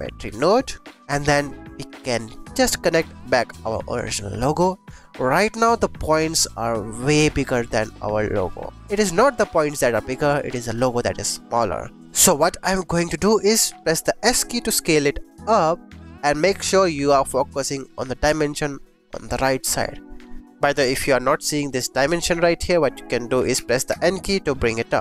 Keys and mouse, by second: 0.6 click, 0.8-2.0 drag, 2.6-4.6 drag, 5.1-6.0 drag, 10.7 click, 12.0 ctrl+z, 14.2 s, 20.6 click, 23.5 n, 23.8 n.